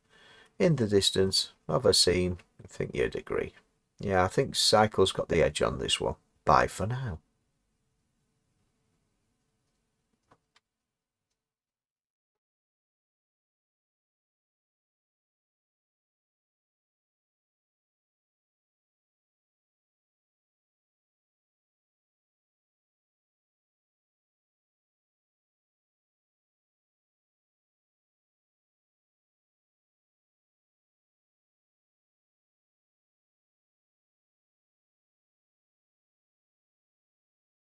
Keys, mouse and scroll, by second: 0.4-1.3 scroll up 1, 1.3-1.6 scroll up 1, 1.6-2.6 scroll down 1, 2.6 click, 2.6 scroll down 1, 3.8-5.4 scroll up 4.